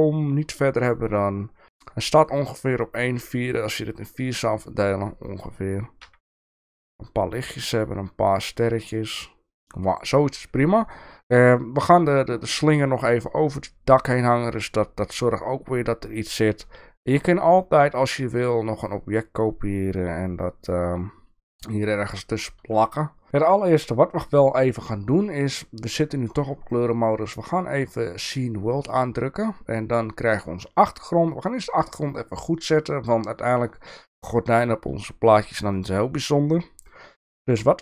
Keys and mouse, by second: 6.0 g, 26.9-30.1 drag, 35.7-36.8 drag.